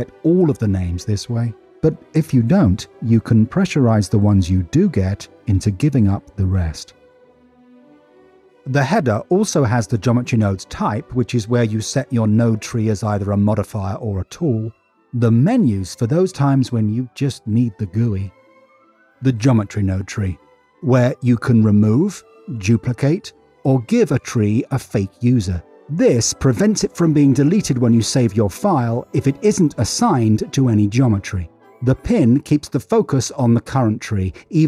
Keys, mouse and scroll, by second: 3.1 middle click, 5.6-7.1 drag, 7.3 middle click.